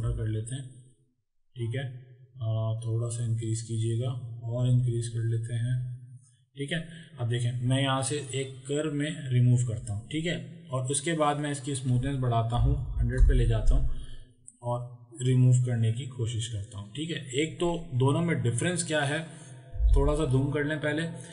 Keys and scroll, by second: 12.7 KP_1, 12.9 KP_0, 19.9 z.